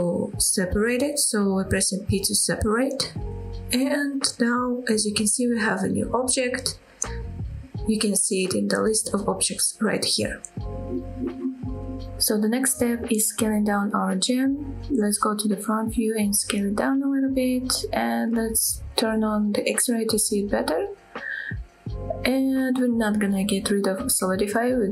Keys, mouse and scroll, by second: 0.9 p, 2.9 scroll up 2, 3.3 middle click, 4.1 Tab, 5.2 click, 5.8-6.3 middle drag, 6.6-8.0 middle drag, 11.2 scroll down 2, 11.4 scroll up 1, 11.6-11.9 middle drag, 12.1 scroll up 2, 12.4 middle click, 14.4 KP_1, 14.9-15.2 scroll up 2, 15.4 shift+middle click, 16.1 s, 18.3 click, 19.3 click, 20.3 s, 23.0 click.